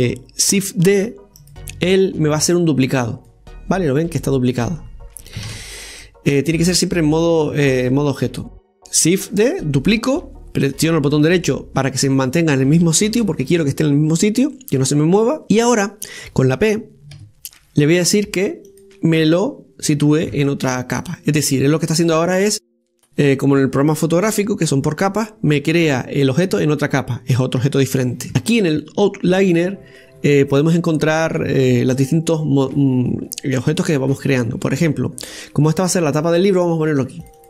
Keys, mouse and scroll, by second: 1.8 shift+d, 2.7-3.8 middle drag, 3.8-5.1 drag, 5.1-6.4 middle drag, 6.4 ctrl+z, 6.9-9.9 middle drag, 15.4-17.8 middle drag, 22.7 scroll down 1, 22.9-26.0 middle drag, 28.3 click, 34.3 right click, 35.1 right click, 35.7 right click, 36.2 right click.